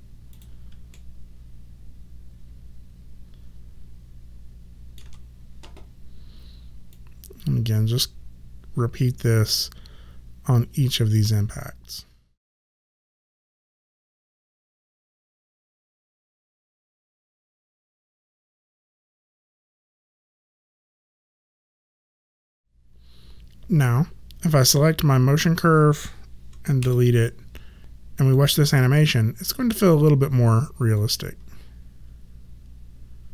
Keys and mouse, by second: 0.3 click, 0.9 ctrl+middle click, 6.9 click, 12.4 e, 12.7 click, 13.4 click, 14.4 ctrl+middle click, 15.2 click, 16.0 ctrl+middle click, 17.5 click, 18.7 e, 18.9 click, 19.7 click, 20.0 middle click, 20.8 click, 21.5 ctrl+middle click, 24.6 click, 26.7 Delete, 27.8 space, 28.1 click.